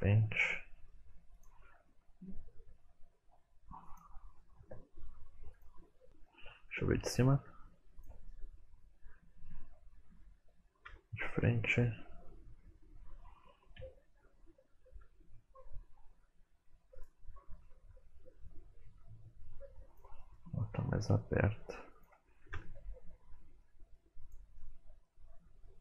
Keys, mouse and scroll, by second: 0.1 middle click, 1.2 click, 1.5 r, 3.0 click, 3.4 r, 4.3 r, 4.6 click, 5.2 middle click, 5.5 g, 6.0 middle click, 6.7 KP_7, 7.5 g, 8.3 middle click, 10.9 KP_1, 13.0 ctrl+KP_3, 13.4-17.0 typing, 15.4 middle click, 20.2 middle click, 20.7 r, 22.4 KP_1, 22.9 middle click, 23.2 click, 23.4 middle click, 23.7 r, 25.1 KP_1, 25.7 r.